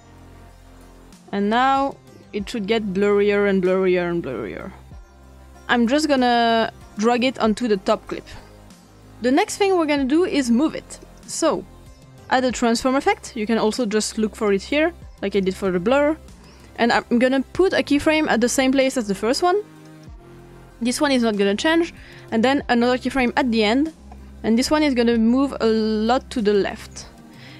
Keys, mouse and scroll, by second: 0.0 click, 0.7-5.4 drag, 6.9-8.1 drag, 11.0 click, 12.5 click, 13.7 click, 14.3 click, 15.3 click, 17.6 click, 19.9 click, 22.2 click, 23.1 click, 25.1-26.2 drag.